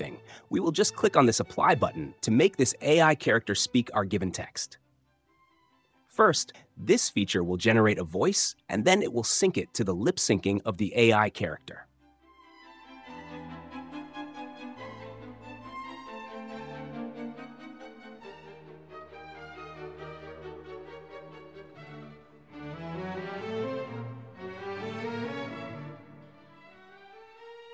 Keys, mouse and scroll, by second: 1.0-2.0 drag.